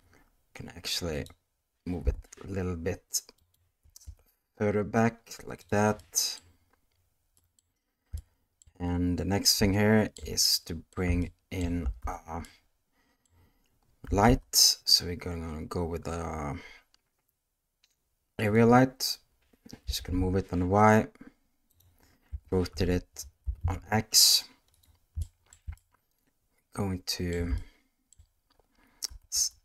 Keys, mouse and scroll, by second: 1.2 click, 2.0 g, 3.8 g, 6.0-6.3 middle drag, 7.4 middle click, 8.2-8.6 shift+middle drag, 8.9-9.4 middle drag, 9.7-10.1 shift+middle drag, 10.4-10.9 middle drag, 11.2-11.6 shift+middle drag, 12.0 alt+a, 12.5 middle click, 14.2 shift+a, 19.8 g, 22.3 r, 25.2 shift+middle drag, 25.7-27.3 ctrl+middle drag, 27.6-28.1 shift+middle drag, 29.0 s.